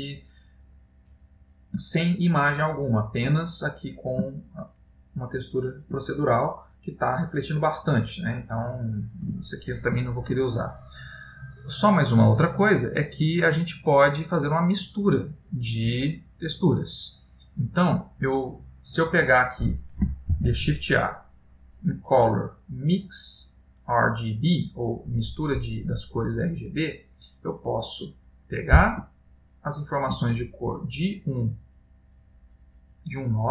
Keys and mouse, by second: 1.0 middle click, 2.1 middle click, 4.7 ctrl+middle click, 7.8 middle click, 13.4 click, 15.4 middle click, 17.2 click, 18.9 click, 20.6 shift+a, 28.4 middle click, 29.4 ctrl+middle click, 31.2 click, 32.5 click.